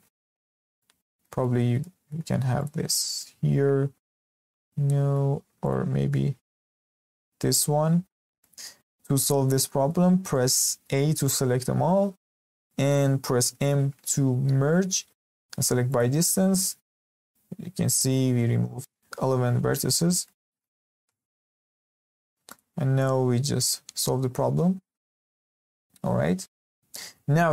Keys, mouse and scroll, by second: 0.5 scroll down 2, 0.8 shift+middle click, 1.6 scroll up 3, 1.8-2.6 shift+middle drag, 2.6 click, 3.2 g, 4.4 scroll down 1, 4.5-5.6 middle drag, 5.6 click, 6.4 g, 8.2 scroll down 1, 8.4-9.0 middle drag, 9.0 scroll up 1, 9.2-10.0 shift+middle drag, 10.0-10.3 scroll up 1, 10.3-11.2 shift+middle drag, 11.2 a, 13.4 m, 19.8-20.2 scroll down 2, 20.2-20.8 shift+middle drag, 20.8 scroll up 2, 21.0-22.0 shift+middle drag, 22.0 scroll up 1, 22.2-22.5 shift+middle drag, 22.5 click, 23.0 click, 23.7 g, 24.7-25.0 scroll down 1, 25.0-27.4 shift+middle drag, 27.4 scroll up 1.